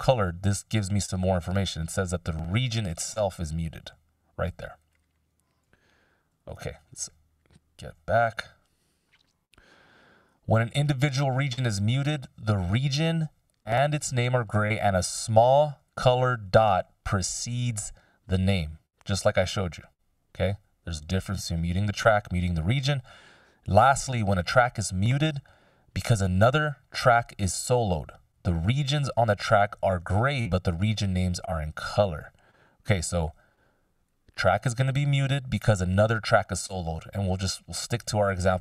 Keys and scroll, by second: 6.3 ctrl+m.